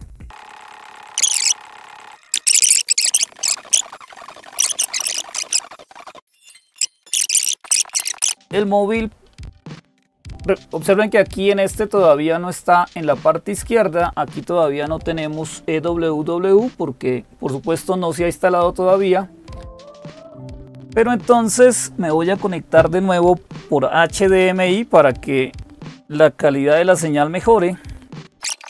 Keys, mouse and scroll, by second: 28.6 click.